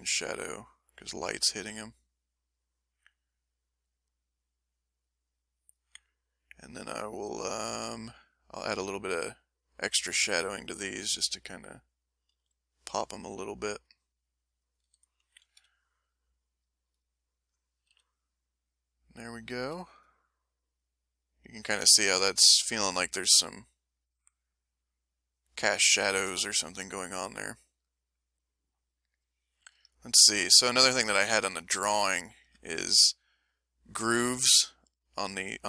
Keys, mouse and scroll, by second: 1.0 middle click, 2.3 middle click, 3.2 click, 4.4-5.5 drag, 5.7 click, 7.4 click, 8.7-9.9 drag, 10.0 middle click, 10.4 right click, 10.9-12.0 drag, 12.3 f, 12.7 click, 13.0 click, 14.2 click, 15.6 m, 15.8-17.6 right drag, 17.9 ctrl+m, 26.5-29.6 ctrl+middle drag, 29.9 ctrl+middle click, 31.0 ctrl+click, 31.5 ctrl+click, 32.3 ctrl+middle click.